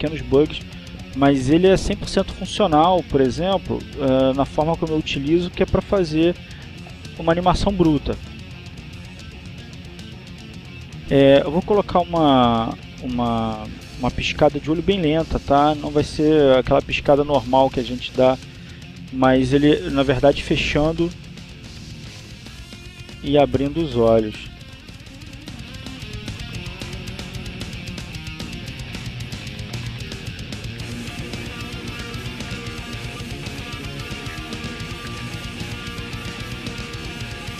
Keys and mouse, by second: 1.2-2.2 drag, 2.6 click, 3.6-4.8 drag, 7.6-8.9 drag, 10.5 click, 12.2-13.4 drag, 15.0 click, 17.9-19.0 drag, 19.2 click, 20.2 click, 21.5 click, 21.8-22.9 drag, 23.4 click, 24.4 click, 27.8 click, 29.7 click, 31.3-33.0 drag, 34.1 click, 35.4 click, 36.3 click.